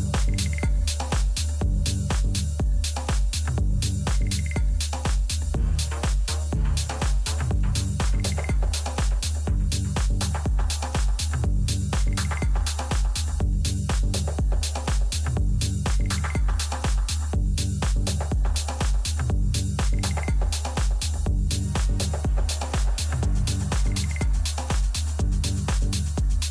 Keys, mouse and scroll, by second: 2.2-5.9 middle drag, 6.9-9.4 middle drag, 9.4-14.6 right drag, 12.0 a, 13.8 a, 16.4 b, 17.3 b, 18.6-20.4 middle drag, 21.5-23.4 drag, 24.9-26.5 drag.